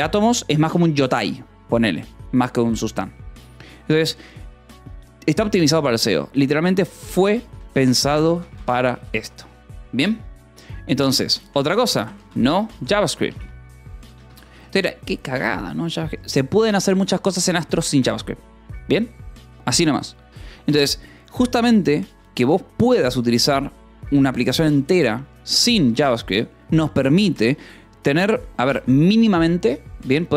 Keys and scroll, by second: 7.1-8.8 typing, 11.4-14.0 typing, 14.4 Escape.